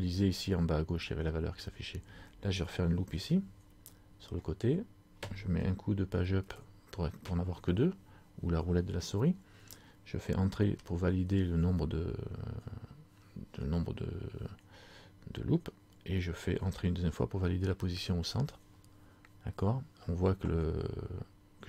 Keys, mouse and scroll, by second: 3.2 ctrl+r.